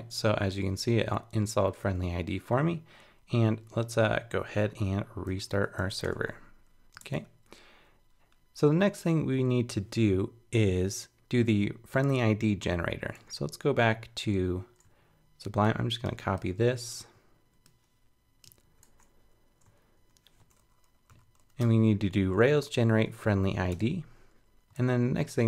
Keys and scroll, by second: 3.7 super+2, 5.3 ctrl+c, 6.8 super+1, 7.0 super+Tab, 18.6 super+c, 18.8 super+Tab, 21.1 super+k, 21.6 super+v, 24.8 super+Tab.